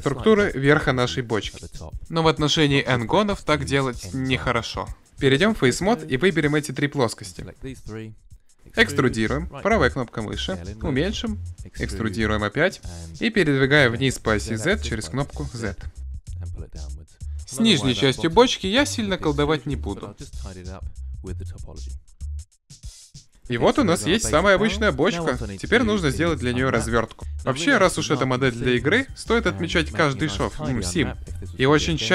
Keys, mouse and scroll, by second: 4.9 ctrl+Tab, 5.7-7.8 right drag, 7.8 e, 9.1 s, 11.0-12.4 drag, 16.4-17.4 drag, 17.4-18.8 middle drag, 18.8 right click, 19.2 Delete, 19.2 click, 21.4 ctrl+Tab, 22.2 click, 22.3 f, 22.6 f, 22.8 f.